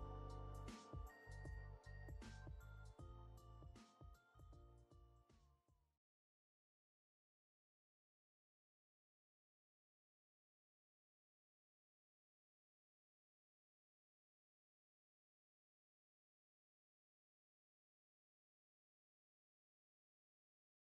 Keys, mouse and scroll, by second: 1.1-1.4 scroll down 2, 1.5 alt+middle click, 2.0 alt+click, 3.5-4.2 typing, 4.9 scroll down 1, 5.0 scroll, 5.1 alt+middle click, 5.5 alt+click, 7.5 alt+middle click, 8.5 scroll up 1, 9.4 alt+middle click, 9.8 alt+click, 10.8-11.1 scroll up 2, 11.1 middle click, 13.2 scroll up 1, 13.8 alt+middle click, 14.6 right click, 15.6 scroll up 1, 18.2 scroll down 1, 18.6 alt+middle click, 20.5 ctrl+z.